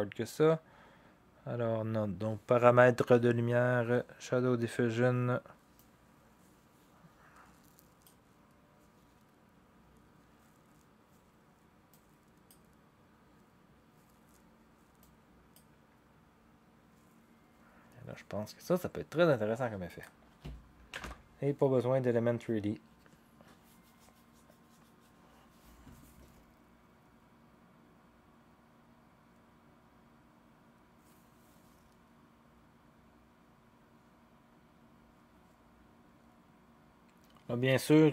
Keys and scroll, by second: 20.9 0.